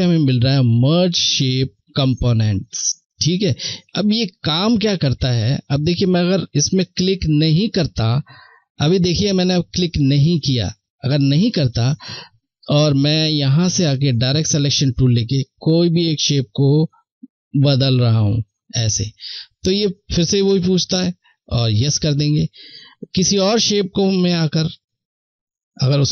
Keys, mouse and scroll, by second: 11.5 click, 21.3 click, 23.8 click.